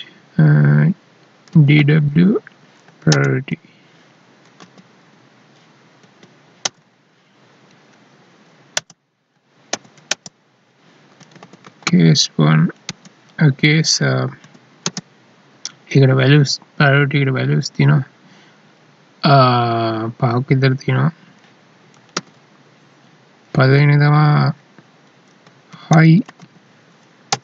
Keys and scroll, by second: 6.0 Down, 8.2 Right, 12.9 space, 14.9 space, 22.2 alt+e.